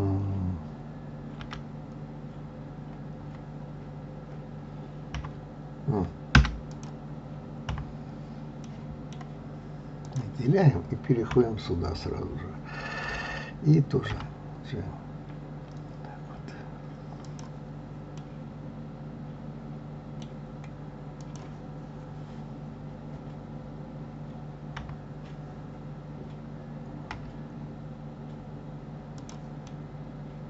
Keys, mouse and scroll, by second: 6.3 \, 6.7 click, 8.6-10.0 middle drag, 10.0 click, 14.1 g, 18.2-21.1 middle drag, 21.1 click, 24.8 KP_3, 27.1 g, 29.7-30.4 middle drag.